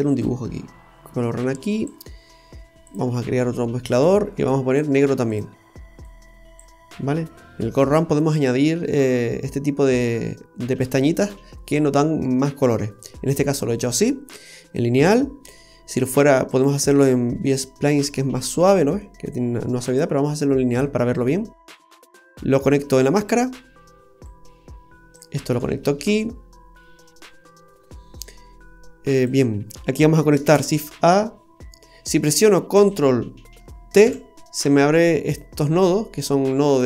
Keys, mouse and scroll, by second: 2.9 click, 5.3 click, 14.5 scroll down 1, 15.6 middle click, 16.5 click, 19.9 click, 21.7 middle click, 22.5 click, 24.2 click, 25.5-26.0 scroll down 2, 25.7 middle click, 26.7-27.4 scroll up 3, 28.2 click, 30.4 shift+a, 34.1 ctrl+t, 35.4-36.1 scroll down 7.